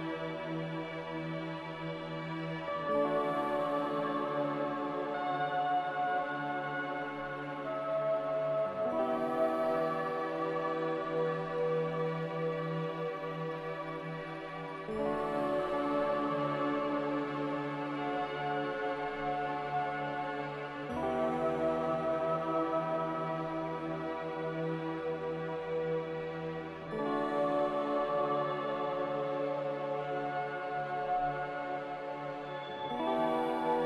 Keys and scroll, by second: 2.0 a, 9.2 a, 11.2 c, 17.7 a, 29.3 a, 31.2 ctrl+z.